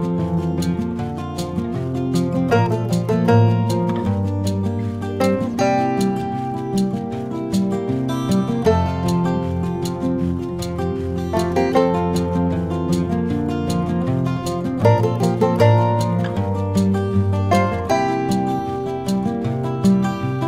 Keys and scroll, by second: 4.8 v, 15.3 v.